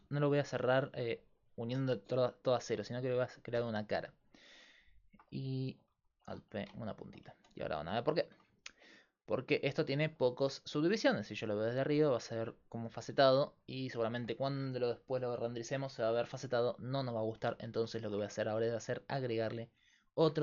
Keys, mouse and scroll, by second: 0.0 z, 0.6-2.5 drag, 1.7 s, 3.5 f, 5.9 alt+p, 6.5 a, 7.4 z, 7.8 Tab.